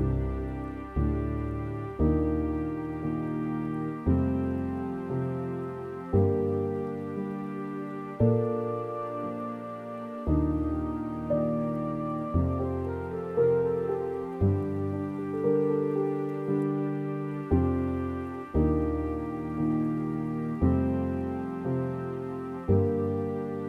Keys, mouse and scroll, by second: 0.2 scroll up 2, 0.8 click, 1.1-1.4 scroll up 3, 2.1 alt+click, 2.6 middle click, 3.5-4.3 scroll up 6, 5.9 alt+shift+click, 6.4 scroll down 1, 8.3 right click, 8.8-9.2 scroll down 3, 9.6 a, 10.2 scroll down 1, 10.4 Tab, 10.8 Tab, 11.3-11.6 scroll down 3, 11.6 middle click, 12.3-13.5 scroll down 2, 13.5-14.0 scroll down 1, 14.0-15.2 middle drag, 15.2-15.6 scroll up 2, 15.6 click, 20.5 right click, 21.0-21.4 scroll up 3, 21.6 click.